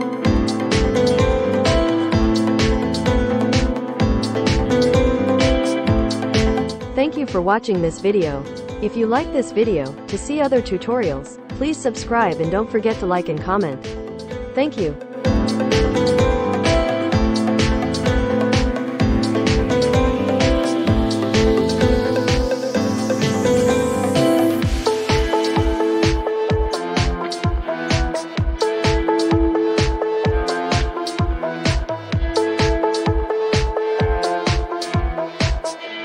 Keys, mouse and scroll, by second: 2.1-4.9 drag, 5.3 click.